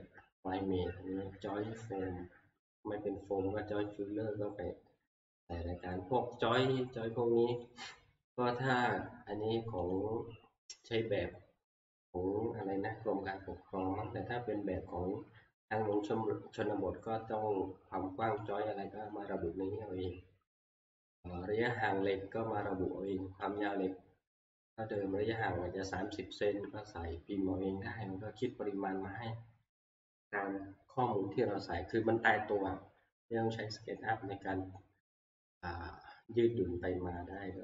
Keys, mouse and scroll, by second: 7.7 click, 9.9 click, 16.2 click, 18.4 click, 23.6 click, 25.4 click, 37.3 scroll.